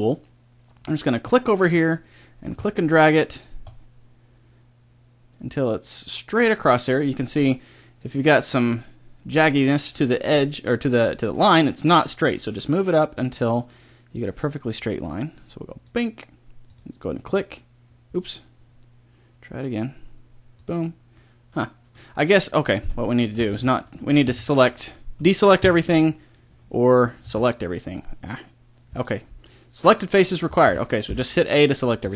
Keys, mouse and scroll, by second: 21.5-23.5 middle drag, 23.5 right click, 24.2 a, 25.6 KP_1, 27.2 shift+k, 30.7 a.